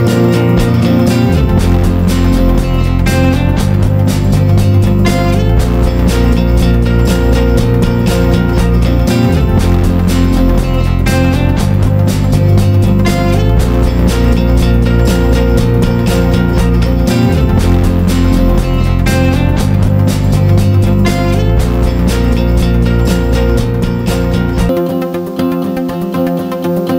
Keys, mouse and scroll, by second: 2.8 F4, 3.3 click, 8.7 ctrl+g, 9.2-12.3 drag, 13.5 click, 14.8 Down, 15.0 typing, 18.3-26.9 drag.